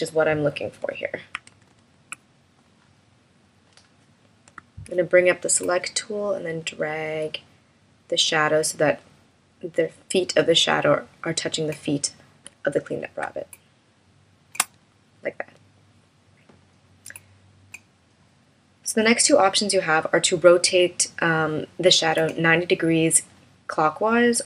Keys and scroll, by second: 1.6 super+-.